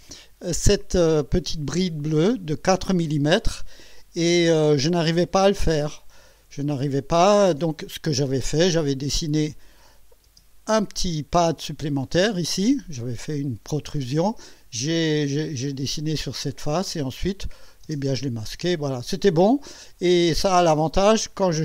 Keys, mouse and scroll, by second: 8.9 click, 10.2 space, 11.4 click, 12.0-12.9 drag, 17.4 click, 17.9 space, 18.5-20.1 drag, 20.8-21.6 drag.